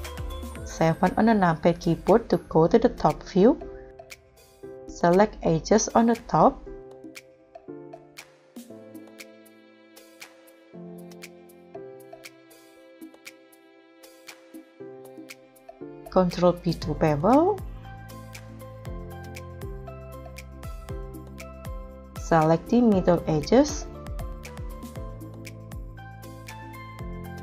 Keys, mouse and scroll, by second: 0.7 KP_7, 1.7 scroll down 1, 2.1 scroll up 2, 7.8 ctrl+click, 8.6 scroll down 1, 10.9 shift+click, 12.6 ctrl+click, 13.4 ctrl+click, 13.4 middle click, 14.4-14.8 scroll up 2, 14.9 scroll down 2, 16.1 ctrl+b, 22.8 middle click, 24.7 ctrl+click, 25.9 shift+click, 27.2 scroll up 1.